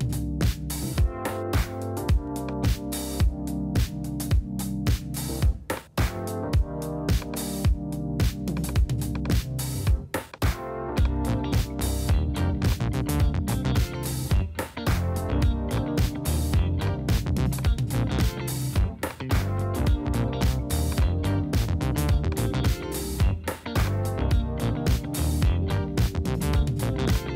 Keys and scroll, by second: 17.7 super+z.